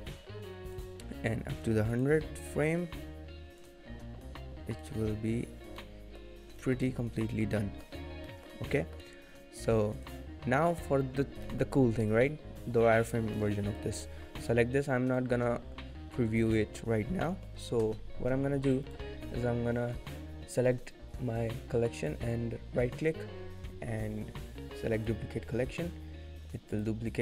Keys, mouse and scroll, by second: 1.5 click, 5.7 click, 6.2 middle click, 6.2-6.6 scroll up 4, 6.6 shift+middle click, 6.8 middle click, 7.1 scroll down 2, 7.3 shift+middle click, 7.6 middle click, 8.1 scroll down 2, 8.3 middle click, 8.6-9.2 scroll up 2, 8.7 middle click, 10.7 click, 10.7-11.5 scroll up 1, 11.5 middle click, 11.5-12.4 scroll down 3, 13.7 click, 15.9 click, 16.5 middle click, 16.8-18.0 scroll up 3, 17.2 middle click, 18.6 click, 18.8 right click, 22.1 right click, 26.7 click.